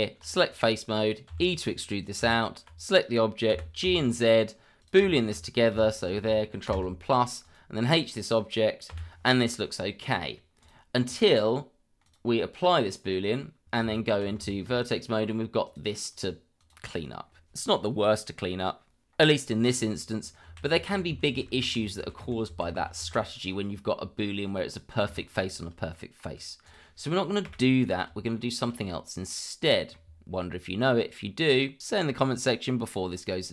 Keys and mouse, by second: 0.5 click, 1.3 e, 2.0 click, 2.2 Tab, 3.5 g, 3.8 z, 5.1 shift+middle drag, 5.9 shift+click, 6.7 ctrl+KP_Add, 7.4 click, 8.9 h, 9.3-10.2 middle drag, 10.6 click, 11.9 click, 13.3 click, 13.8 Tab, 14.5 shift+middle click, 15.0 middle click, 15.6 click, 16.1 click, 16.6 click, 16.8 click, 20.5 ctrl+z, 24.2 middle drag, 25.2 shift+middle drag, 25.9 middle drag, 26.3 click, 26.6 click, 27.4 Delete, 28.3 shift+middle drag, 29.3-29.9 middle drag.